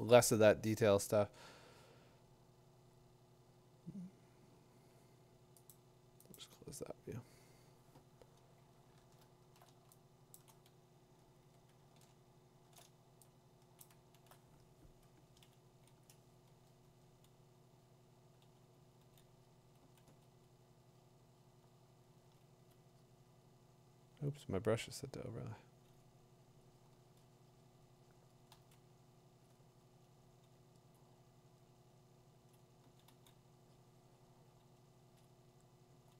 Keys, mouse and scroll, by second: 5.7 click, 6.4 click, 8.9 middle click, 9.0 middle click, 9.1 middle click, 9.4 middle click, 10.3 3, 10.3 click, 10.3 5, 10.9 middle click, 10.9 4, 11.9 middle click, 12.0 middle click, 12.3 middle click, 12.4 middle click, 12.6 middle click, 13.4-13.8 scroll, 13.8 click, 14.1 middle click, 16.8 [, 16.8 [, 18.4-20.3 typing, 22.7 click, 24.9 click, 25.6 click, 29.5 click, 30.9 click, 32.6 click, 34.9 click, 34.9 [, 35.3 click, 35.9 [.